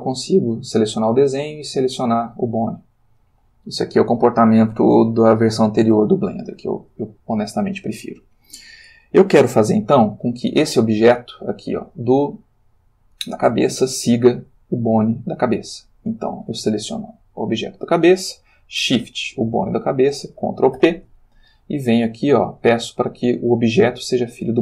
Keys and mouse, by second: 0.1 click, 1.4 click, 2.4 click, 3.2 click, 6.0 click, 10.6 g, 13.4 Escape, 14.9 click, 16.4 click, 19.3 shift+click, 20.8 ctrl+p, 24.4 click.